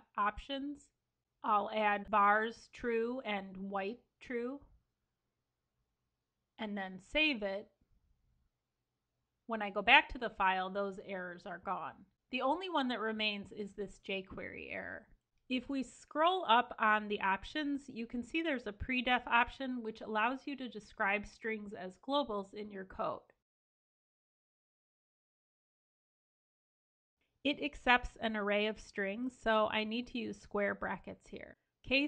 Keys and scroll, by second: 6.6 super+s.